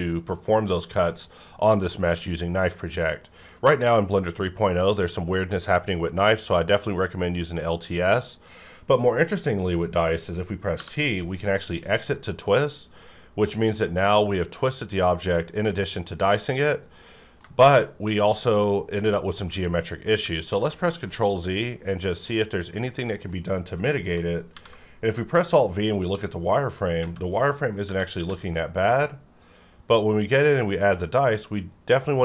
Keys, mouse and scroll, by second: 10.7 scroll up 1, 10.9 t, 11.7 click, 16.8 right click, 17.2 scroll down 1, 17.4 shift+middle click, 17.6-18.1 shift+scroll up 2, 17.8 middle click, 18.6-19.5 scroll down 1, 19.5 middle click, 20.5 ctrl+z, 21.0-24.4 middle drag, 24.4 alt+v, 25.3 click, 25.3 click, 26.0 scroll down 1, 26.2 middle click, 27.4 middle click, 28.1 q, 29.4 click, 30.3-30.9 scroll up 1, 30.9-32.2 middle drag.